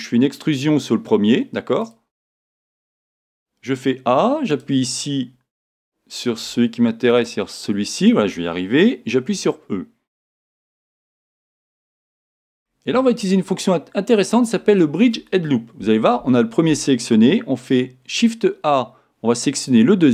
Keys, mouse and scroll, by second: 0.4 e, 1.9 click, 3.2 e, 4.5 alt+click, 5.7-7.2 alt+drag, 11.1 e, 12.3 click, 12.7-19.5 middle drag, 19.5 alt+click.